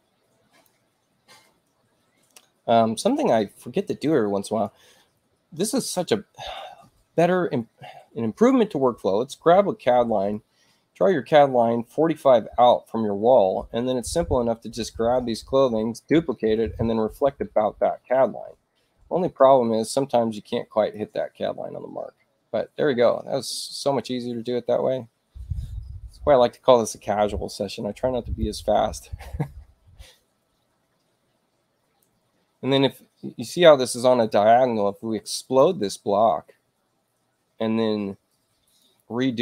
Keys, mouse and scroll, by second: 3.3-4.5 ctrl+drag, 10.2 click, 13.3 space, 13.9 click, 15.0 ctrl+alt+c, 20.6 click, 23.4 click, 27.3 space, 28.1 click, 35.3 click, 38.7 click.